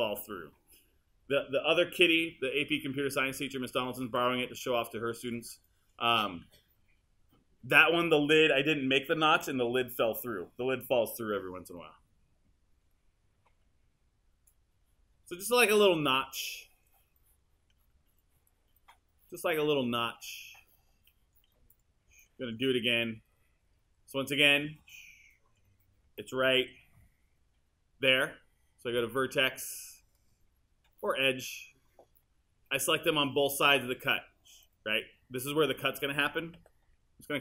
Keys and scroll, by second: 26.6 3, 36.6 w.